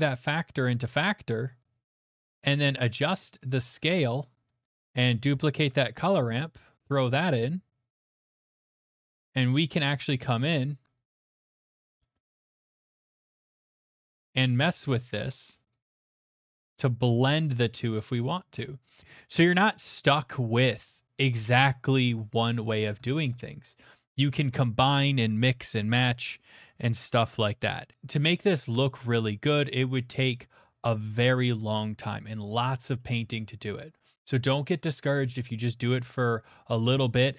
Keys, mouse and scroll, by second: 4.4 click, 5.0 click, 5.5 d, 6.2 click, 7.9 click, 8.3 click, 8.7 click, 9.7 click, 10.8 click, 13.7 click, 15.1 click, 16.5 click, 17.7 click, 22.9 middle click, 23.2 shift+middle click, 33.0 middle click, 33.3 middle click, 33.8 middle click, 34.7 middle click, 36.7 click.